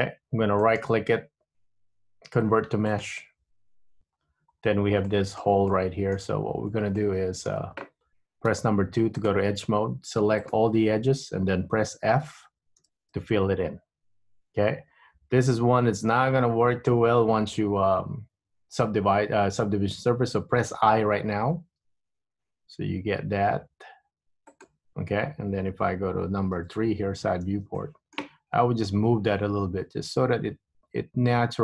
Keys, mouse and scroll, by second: 0.7 right click, 4.1 Tab, 4.7-5.5 scroll up 3, 5.5 shift+middle click, 6.1 middle click, 6.7-7.2 scroll up 2, 7.2 shift+middle click, 8.6 2, 9.3 click, 10.6 alt+click, 13.0 f, 21.7 i, 26.7 KP_3, 27.9 shift+middle click, 29.1 g.